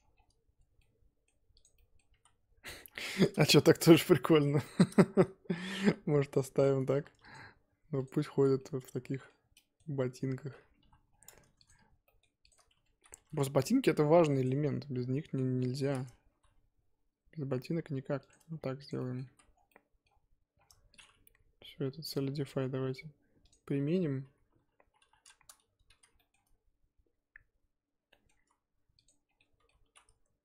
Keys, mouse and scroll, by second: 0.1-0.6 scroll down 1, 0.6 Tab, 0.8 middle click, 1.6 click, 1.7 middle click, 2.2 z, 2.6 middle click, 2.9 scroll up 1, 3.1 Tab, 3.4-5.8 shift+middle drag, 5.8 z, 6.3 middle click, 7.0 2, 7.3 click, 8.0 click, 8.4 scroll down 1, 8.6-10.8 middle drag, 10.8 KP_3, 11.1 scroll down 3, 11.4 Tab, 11.7 click, 12.0 shift+middle click, 12.5 shift+click, 12.6 scroll up 1, 12.7 Tab, 13.0 z, 13.1 1, 14.4 click, 15.8-16.3 scroll up 4, 16.3 g, 18.4 Tab, 18.5-18.9 scroll down 4, 18.9 click, 19.0 middle click, 19.2 z, 19.5 scroll down 1, 19.7 middle click, 20.6-21.0 scroll up 2, 21.0 click, 23.5 click, 23.8 KP_1, 25.0 KP_3, 25.4 scroll up 3, 25.7 Tab, 25.9 z, 26.1 shift+middle click, 26.4-28.1 scroll up 1, 28.1 middle click, 28.3 z, 29.2 scroll down 3, 29.4 middle click, 29.8 3.